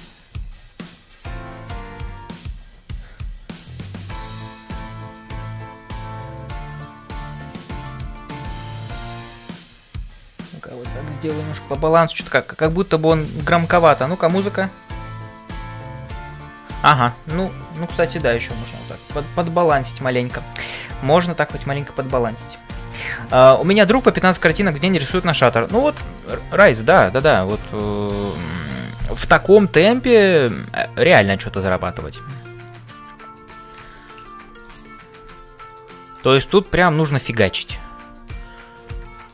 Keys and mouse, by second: 0.0-39.3 typing, 26.6 middle click, 27.2 click, 27.7 shift+middle click, 28.1 middle click, 31.2 click, 33.9 shift+middle click, 34.6 click, 37.5 click, 39.1 shift+middle click.